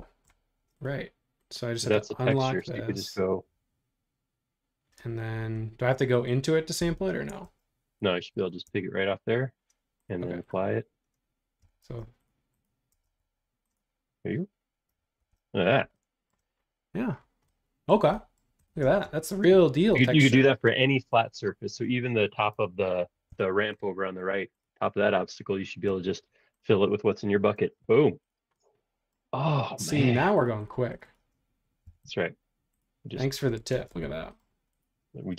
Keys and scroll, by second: 6.8 b, 8.0 Escape, 8.4 Escape, 8.6-9.0 typing, 11.6 b, 12.9 space, 13.1 ↻, 15.2 super+1, 18.9 space, 21.7 space, 22.7 super+1, 25.8 b, 27.3 Escape, 27.6 space, 27.8 Escape, 31.8 b, 33.7 space, 33.9 Escape.